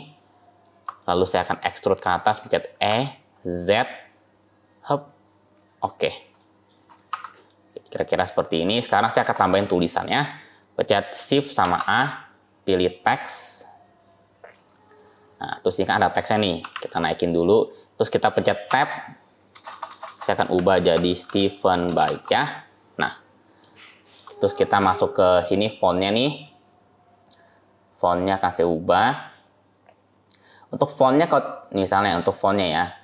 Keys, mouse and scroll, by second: 0.6 shift+click, 0.8 middle click, 2.1 scroll down 1, 2.7 e, 5.8-6.7 scroll down 2, 6.2 middle click, 6.7 click, 6.9 Tab, 7.4 middle click, 8.7 shift+middle click, 9.2 click, 9.6 scroll up 1, 11.5 shift+a, 14.9-16.5 scroll down 3, 15.3 middle click, 16.5 g, 17.4 middle click, 18.5 Tab, 19.4-22.2 typing, 23.6 shift+middle click, 25.7 click, 27.9 click, 32.3 click.